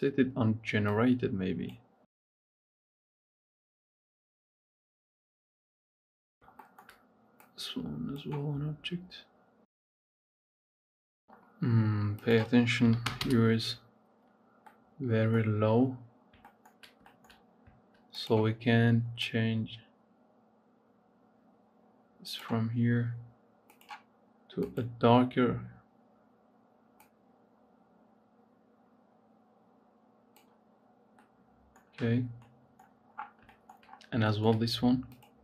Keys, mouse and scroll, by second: 0.7-2.3 drag, 2.8 click, 3.6 click, 4.4 click, 5.1 click, 5.7 click, 6.1 scroll down 3, 6.2 shift+middle click, 7.2 click, 9.5 middle click, 10.0-10.6 scroll up 2, 10.7 scroll down 10, 10.8-11.2 scroll up 5, 10.9 shift+middle click, 12.0-14.4 drag, 14.4-16.1 middle drag, 16.1-16.4 scroll down 4, 16.4 shift+middle click, 17.3-18.2 scroll up 3, 18.2 click, 23.6 click, 30.6 scroll down 2, 31.0-32.9 middle drag, 32.9-33.5 scroll down 3, 33.5 shift+middle click, 33.7-34.2 scroll up 5, 34.2 shift+middle click, 35.0 click.